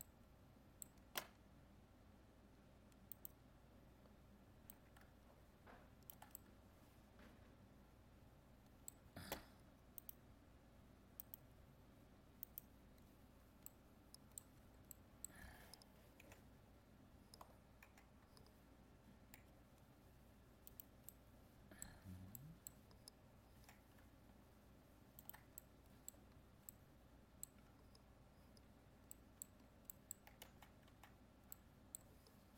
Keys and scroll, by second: 30.4 ctrl+z.